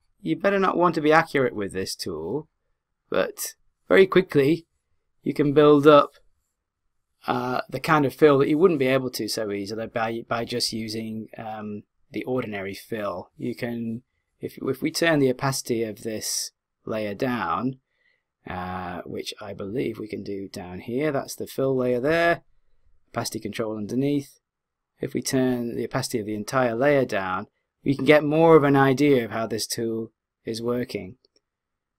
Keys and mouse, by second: 24.0 click.